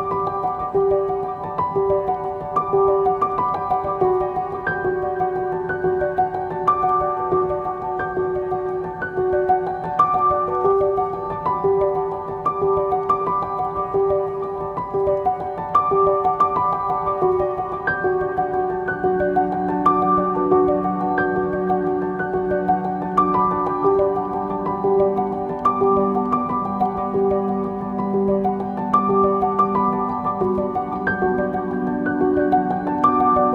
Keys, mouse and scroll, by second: 1.0 click, 1.6 g, 5.5-7.1 middle drag, 9.9 middle click, 12.3 click, 16.1 click, 17.1-17.9 scroll down 1, 18.9-24.4 drag, 20.3 Tab, 20.5-21.6 scroll up 1, 22.4-23.3 scroll down 1, 24.4 scroll up 1, 25.3 scroll down 1, 28.0 click, 29.3 Tab, 30.1-32.3 scroll down 1.